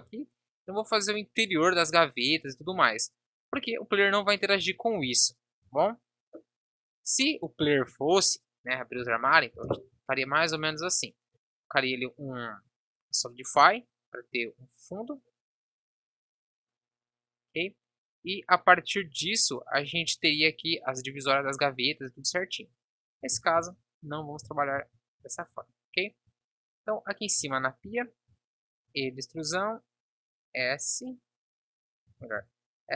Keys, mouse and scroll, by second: 5.6 Tab, 6.0-8.1 drag, 8.9 Delete, 18.9 Tab, 23.4 ctrl+z, 25.4 Tab, 26.3 Tab, 27.3 KP_7, 28.7 e, 32.1 ctrl+z, 32.7 s.